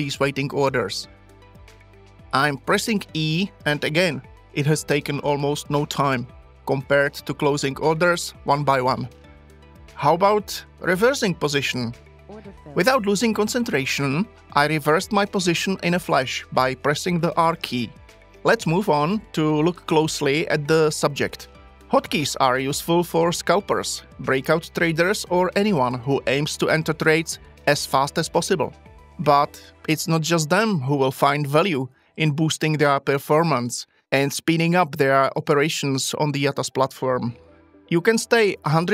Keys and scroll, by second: 3.9 e, 12.1 r.